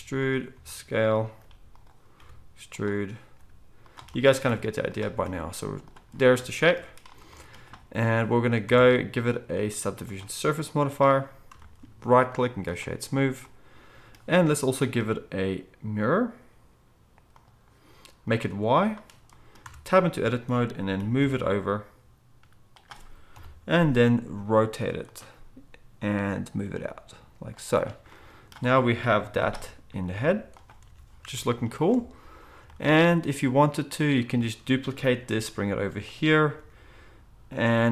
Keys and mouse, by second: 0.0-2.1 typing, 3.3 g, 4.4 e, 5.0 s, 8.6 Tab, 11.5-19.6 shift+drag, 11.5-19.6 shift+middle drag, 19.6 Tab, 20.1 a, 21.0 g, 23.3 KP_7, 24.3 r, 26.6 g, 29.0 middle click, 29.0 KP_1, 29.9 g, 30.9 Tab, 30.9 middle click, 32.0 alt+a, 35.3 shift+d, 36.5 r.